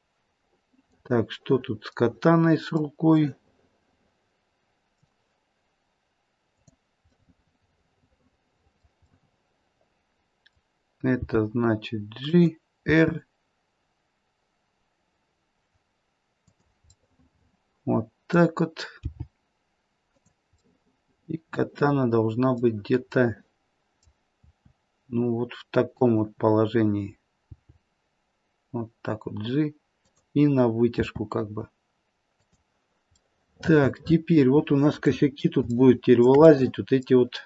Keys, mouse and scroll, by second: 1.1 middle click, 3.5 middle click, 6.4 click, 7.2 middle click, 9.1 middle click, 11.1 g, 12.8 r, 16.9 middle click, 18.0 middle click, 18.9 middle click, 18.9 g, 21.3 middle click, 21.4 middle click, 21.6 middle click, 23.2 middle click, 24.4 r, 31.0 r, 33.1 middle click, 33.5 middle click, 34.3 middle click, 35.1 middle click, 35.3 middle click, 35.6 shift+middle click, 35.6-36.5 shift+scroll up 1, 36.5 middle click.